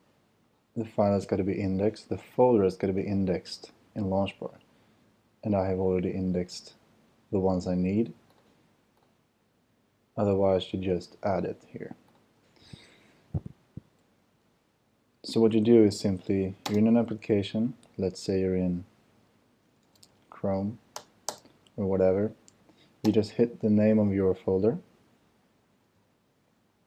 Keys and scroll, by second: 14.6 super+w, 16.6 super+space, 19.5-20.8 typing, 20.9 Return, 25.4-26.7 typing.